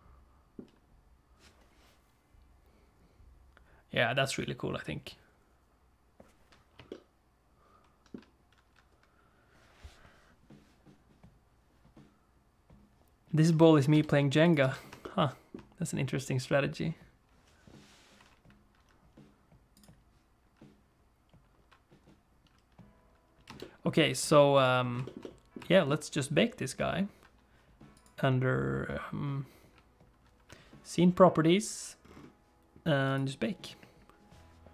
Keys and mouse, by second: 0.1 shift+middle click, 7.0-8.3 shift+middle drag, 14.0 space, 14.6 space, 15.0 shift+click, 15.5 middle click, 19.8 click, 23.5 space, 23.6 middle click, 24.6 click, 25.0 shift+middle click, 25.2 middle click, 25.7 shift+middle click, 33.1-34.7 drag.